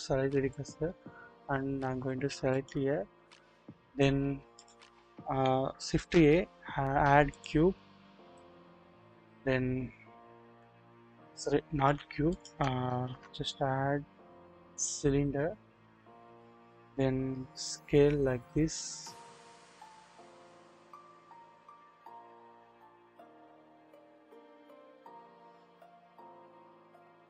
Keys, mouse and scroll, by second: 2.5 click, 4.5 click, 5.9 shift+a, 8.4-9.4 middle drag, 9.8-10.4 scroll up 1, 10.4 1, 10.5 KP_1, 11.1-11.5 scroll up 1, 11.8 1, 11.8 Delete, 12.3 click, 13.0 typing, 15.7 scroll down 1, 16.8-17.2 scroll down 1, 17.2 typing.